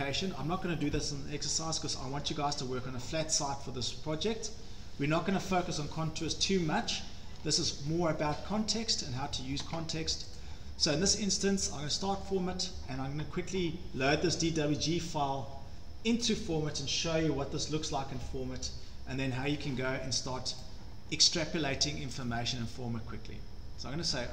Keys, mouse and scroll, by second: 1.0-1.7 scroll, 2.1 middle click, 2.4 scroll, 4.2 middle click, 4.4 scroll, 6.7-7.1 scroll, 7.4 scroll, 8.1-8.7 scroll, 10.4 click, 11.4-11.8 scroll down 3, 12.0 click, 20.6 click, 22.3 click.